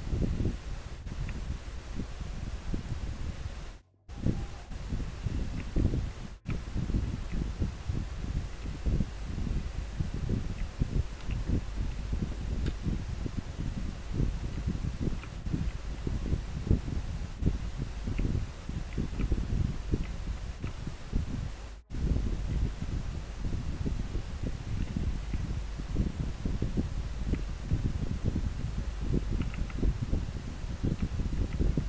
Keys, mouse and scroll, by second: 0.0 scroll up 1, 3.0-4.6 scroll down 1, 7.4 scroll up 1, 8.3 scroll down 1, 10.7 scroll up 1, 11.0 scroll down 1, 14.7 scroll up 1, 15.0 scroll down 1, 18.9 scroll up 1, 22.6 scroll down 1, 25.3 scroll down 1, 27.5 scroll up 1, 31.6 scroll up 1.